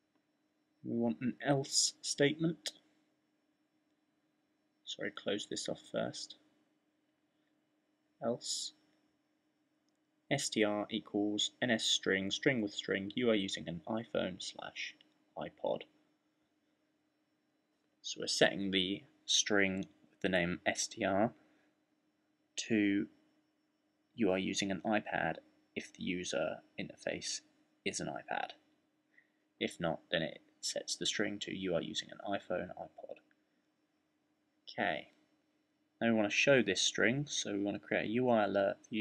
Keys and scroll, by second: 0.0-1.3 typing, 2.3-4.9 typing, 6.1-7.8 typing, 9.9-24.5 typing, 25.8 shift+}, 30.7-39.0 typing.